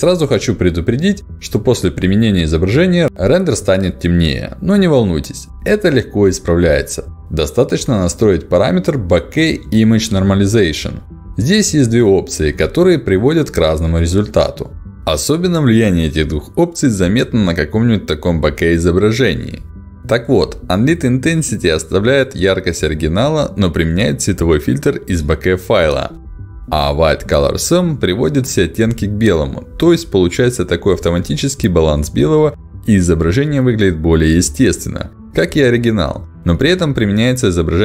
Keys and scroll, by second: 9.1 ctrl+alt+d.